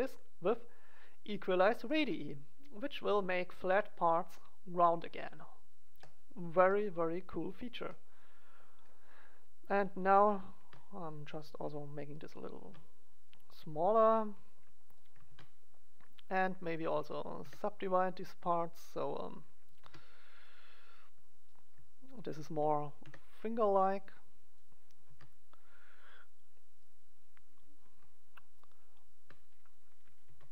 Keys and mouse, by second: 1.8-3.7 drag, 2.9 middle click, 2.9 right click, 3.9-5.8 drag, 3.9-5.8 middle drag, 5.9-7.9 middle drag, 9.7-10.9 right drag, 10.5 ctrl+a, 10.9 click, 12.1-13.7 middle drag, 12.5 ctrl+a, 14.9 middle click, 15.2 ctrl+a, 16.0 click, 16.1 middle click, 16.7-17.8 middle drag, 17.3 w, 18.0 click, 18.8 right click, 19.7 ctrl+a, 20.8 click, 22.4 click, 23.1 w, 23.3 click, 24.5 right click, 25.0 ctrl+a, 26.9-28.6 drag, 29.6 click, 30.0 right click, 30.2 ctrl+a.